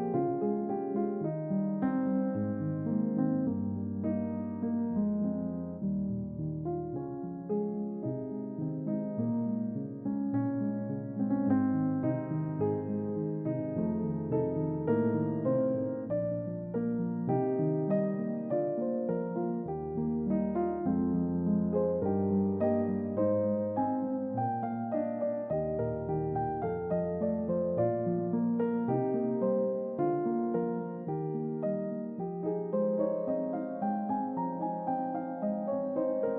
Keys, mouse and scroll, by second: 2.6 click, 4.2 click, 5.2 click, 5.8-7.3 drag, 9.0-10.4 typing, 9.0-9.7 drag, 10.4 click, 11.1-11.7 drag, 12.7-13.3 drag, 16.9 g, 17.7 z, 25.7 click, 27.2 click, 27.6-28.3 drag, 30.2-30.9 typing, 34.0 double click, 35.3 Tab, 35.7 click.